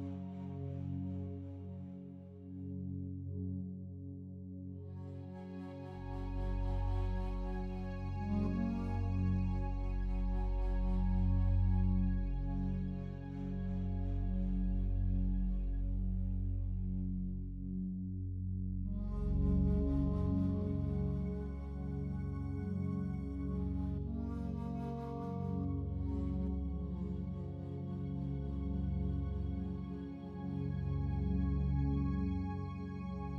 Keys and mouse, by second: 1.2 click, 1.6 click, 2.5-3.4 typing, 4.1 click, 5.2 i, 5.4 click, 6.3 click, 6.6 space, 7.8 space, 7.9 click, 8.8-9.5 typing, 9.7 click, 12.4 click, 13.3 click, 13.8 click, 15.6-16.9 drag, 17.3-18.5 ctrl+alt+drag, 20.2 click, 22.5-26.2 drag, 26.5 i, 29.0-29.7 drag, 31.0-32.9 drag.